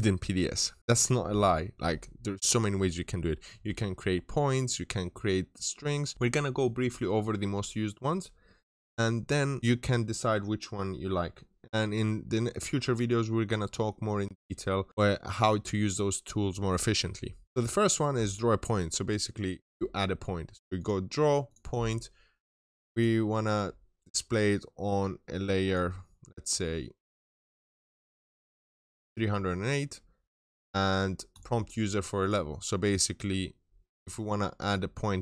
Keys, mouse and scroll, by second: 17.4 double click, 20.6 click, 23.5-24.1 scroll down 1, 24.1 click, 25.8-27.0 scroll up 1, 27.1-27.9 scroll down 1, 28.8 click, 32.7 middle click, 33.7 scroll up 1, 34.1 middle click, 34.8 scroll down 1, 34.9 scroll up 1.